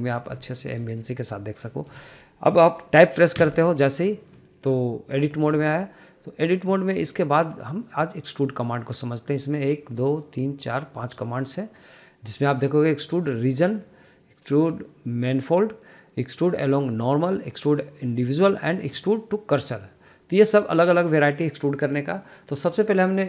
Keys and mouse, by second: 0.0 middle drag, 0.6 shift+middle click, 1.2 shift+middle drag, 1.6 shift+middle click, 2.2 shift+middle drag, 2.5 middle click, 2.8 shift+middle click, 4.2 Tab, 4.9 middle click, 6.0 shift+middle click, 6.3 shift+middle click, 9.2-23.2 drag.